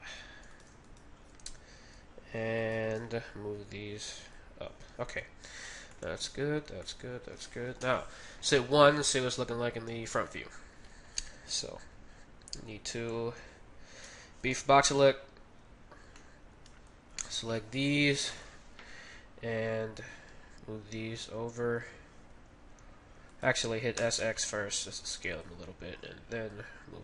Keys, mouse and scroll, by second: 0.9-4.3 right drag, 3.5 g, 5.7 a, 5.9 middle click, 6.6 z, 7.8 KP_1, 8.8 middle click, 11.0-12.5 middle drag, 12.5 z, 14.1 b, 14.7 z, 14.7 b, 16.2-18.2 middle drag, 16.5 b, 18.2 KP_1, 20.2-21.9 drag, 23.9 s, 26.6-27.0 drag.